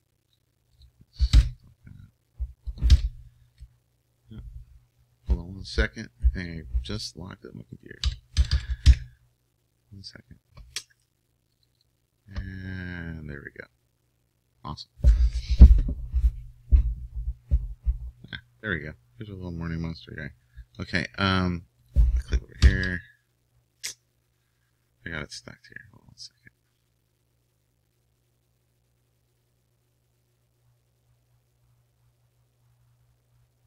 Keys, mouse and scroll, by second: 3.4-16.6 drag.